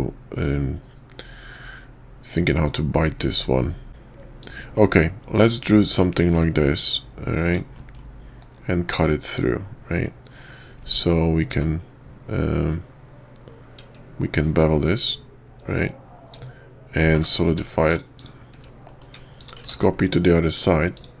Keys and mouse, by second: 3.2 middle click, 4.4-18.0 drag, 18.9 middle click, 19.4 shift+click, 19.7 alt+x, 21.0-21.2 drag.